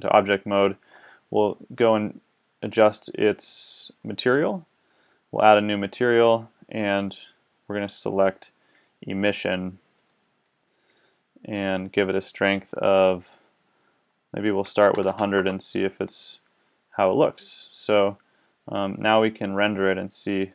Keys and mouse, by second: 2.0-6.3 drag, 7.0-8.9 middle drag, 11.7-15.1 middle drag, 15.1 KP_0, 19.4-20.5 middle drag.